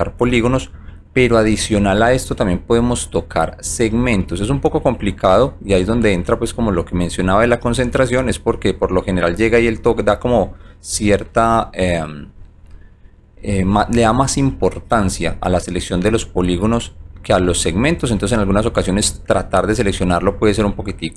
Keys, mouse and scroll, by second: 0.0 click, 0.5 click, 1.3 click, 1.8 click, 2.3 click, 3.0 click, 4.3 click, 5.1 click, 6.3 alt+right click, 8.0 alt+click, 8.6 click, 9.2 click, 9.9 click, 11.3 alt+right click, 12.8 alt+middle click, 14.2 alt+click, 15.3 click, 15.9 click, 16.6 click, 17.6 click, 18.2 click, 19.3 click, 20.1 click.